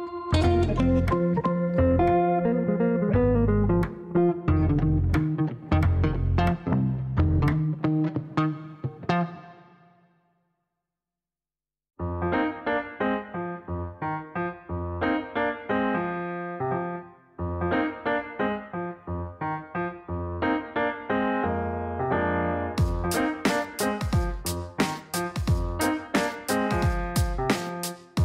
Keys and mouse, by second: 1.0 click, 2.9 click, 7.7 click, 9.8 click, 12.1 click, 14.2 m, 14.7 m, 15.3 m, 16.9 click, 19.7 click, 21.0 right click, 23.3 right click, 24.3 click, 25.3 click, 26.6 click.